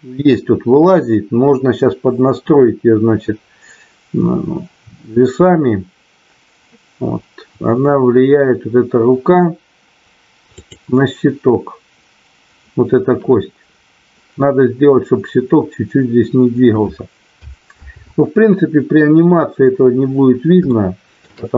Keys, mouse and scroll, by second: 10.4 click, 17.8 ctrl+z, 20.7 shift+middle click.